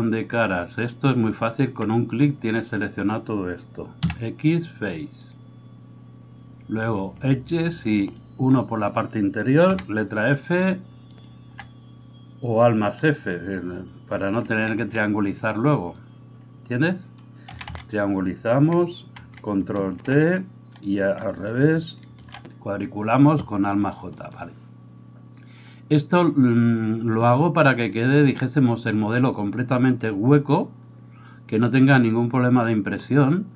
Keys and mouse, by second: 1.2 alt+middle click, 1.2 alt+right click, 8.1 alt+right click, 14.6 alt+f, 17.5 a, 17.7 a, 20.2 ctrl+t, 22.5 alt+j.